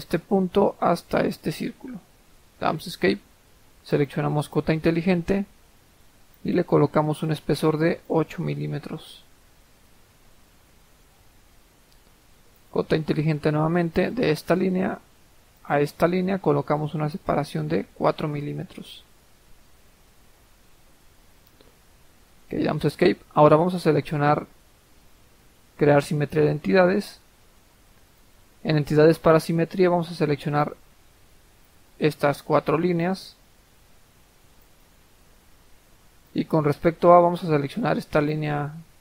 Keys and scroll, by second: 2.3 Escape, 8.8 8, 9.1 Return, 10.3 Escape, 18.3 4, 18.7 Return, 21.7 Escape.